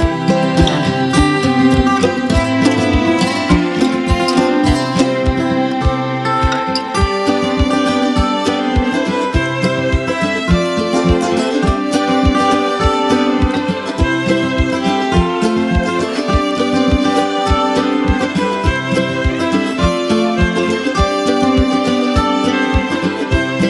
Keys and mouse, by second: 0.3 click, 4.9 right click, 9.2 click, 12.5 click, 16.2 click, 18.4 right click, 19.4 click, 21.1 click.